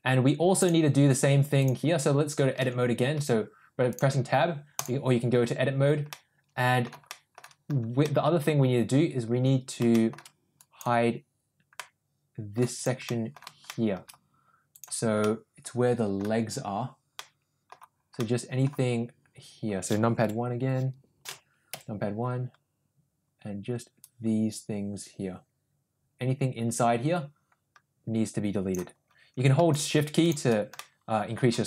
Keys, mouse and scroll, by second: 0.6 click, 1.6 click, 2.8 Tab, 3.4 Tab, 3.9-5.0 drag, 6.1 middle click, 7.1 shift+middle click, 8.1 middle click, 9.9 shift+middle click, 10.7 click, 11.8 middle click, 13.1 middle click, 13.7 shift+middle click, 14.7 click, 15.2 middle click, 17.2 middle click, 18.2 middle click, 20.2 KP_4, 24.0-28.8 drag, 29.9 shift+click, 30.8 middle click.